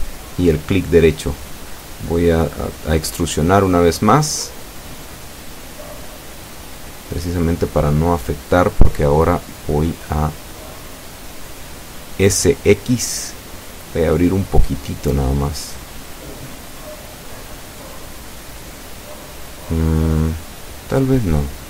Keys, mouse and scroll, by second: 0.6 Tab, 1.9 a, 3.0-3.4 scroll up 1, 5.1 alt+shift+right click, 7.7 e, 8.9 s, 13.2 click, 17.7 right click, 18.7 shift+right click, 20.7 s, 21.2 x.